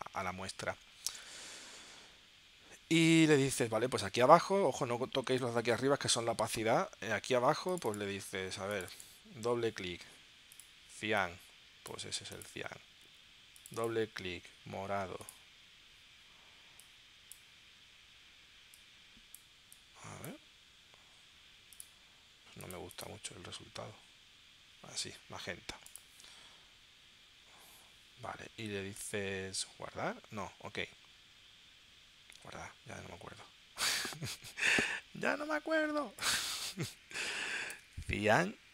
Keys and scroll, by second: 37.5 shift+c, 37.8 a.